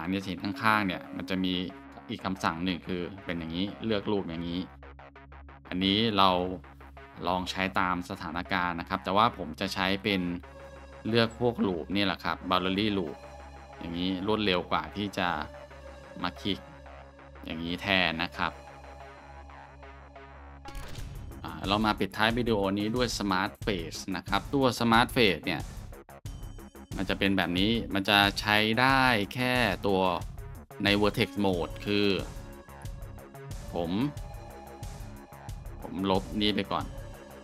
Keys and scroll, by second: 10.4 Tab, 13.0 2, 19.7 Tab, 20.3-20.6 scroll, 25.8 Tab, 29.4 Tab, 32.1-32.5 scroll, 33.6 scroll.